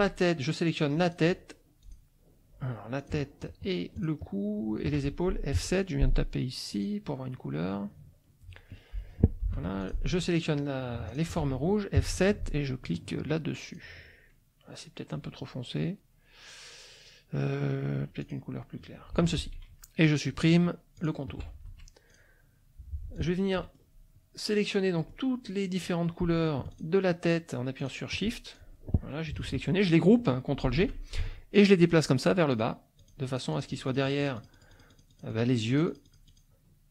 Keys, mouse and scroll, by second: 1.0 click, 1.8 click, 3.0 click, 4.0 shift+click, 5.6 F7, 6.7 click, 9.5 F2, 9.8 click, 11.1 shift+click, 12.0 F7, 13.7 click, 18.2 click, 19.1 F1, 21.0 shift+click, 21.7 shift+F1, 22.1 shift+click, 23.1 click, 23.6 middle click, 23.6-23.9 scroll up 1, 25.0 middle click, 25.0-25.3 scroll up 1, 25.4 click, 26.7 shift+click, 27.2 shift+click, 27.8 shift+click, 28.5-29.5 shift+drag, 29.4 ctrl+z, 30.6 ctrl+g, 32.5 click, 33.0-36.5 drag.